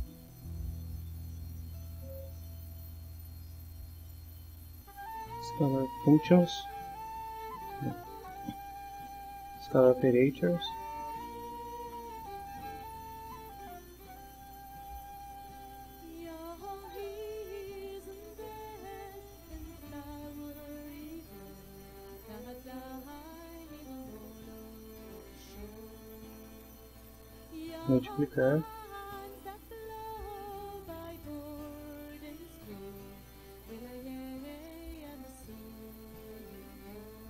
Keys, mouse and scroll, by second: 1.6 right click, 5.2 click, 7.5 click, 8.4 right click, 9.6 click, 11.1-12.6 drag, 13.7 click, 15.0 click, 16.6 click, 18.3-19.4 drag, 20.3-21.9 drag, 22.2 click, 23.3 click, 25.1-26.7 drag, 27.1 click, 28.6 click, 29.6-31.1 drag, 33.4 click, 34.6 middle click.